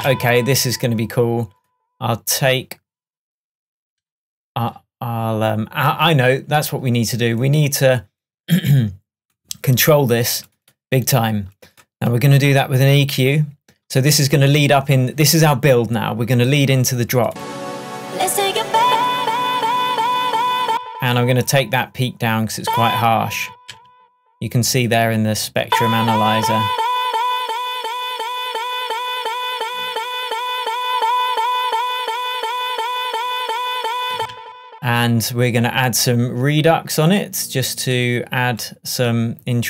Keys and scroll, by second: 0.0 space, 20.7 space, 22.6 space, 25.7 space, 34.2 space.